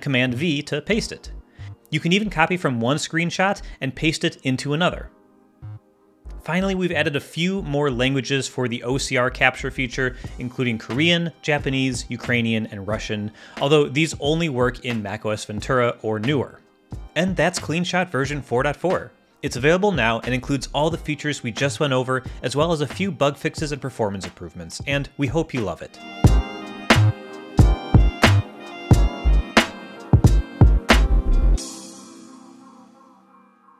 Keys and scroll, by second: 0.2 super+v.